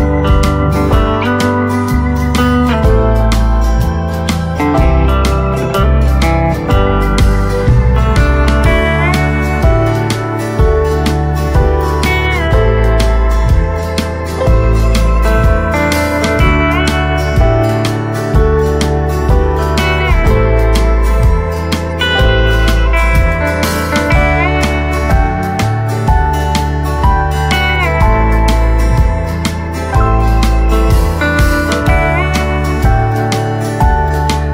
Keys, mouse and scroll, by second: 1.7 right click, 2.2 click, 2.5 right click, 8.5-11.2 right drag, 11.2 scroll down 1, 11.6-18.0 right drag, 18.0 click, 19.2 right click, 20.0 scroll up 1, 21.7 click, 27.3 click, 29.6 shift+click, 29.9 shift+right click, 30.9 click.